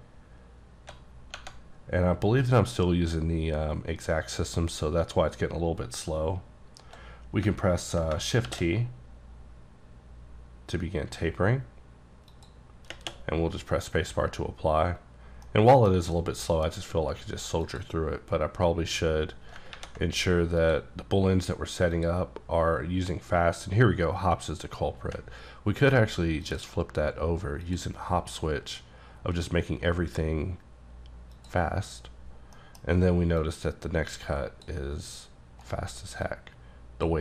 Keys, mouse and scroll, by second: 8.5 t, 12.3 click, 15.2 scroll down 1, 15.5 middle click, 15.9 scroll down 3, 16.4 shift+middle click, 17.7 shift+click, 20.6 click, 22.0 click, 26.5 click, 27.7 click, 31.4 click, 32.5-33.4 scroll up 2, 32.6 middle click, 33.4 click, 35.7 right click, 36.3 click.